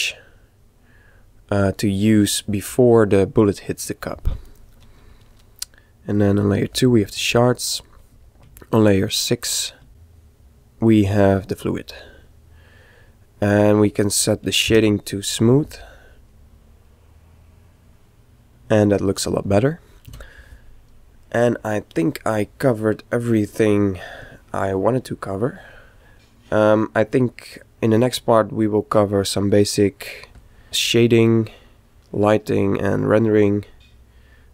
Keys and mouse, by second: 0.2-2.0 middle drag, 2.5-4.3 middle drag, 5.7-8.9 drag, 10.0 Escape, 10.0 click, 12.1-13.8 middle drag, 15.0 t, 20.7 a, 21.6-23.3 middle drag, 24.8-28.1 middle drag, 32.0-33.8 middle drag.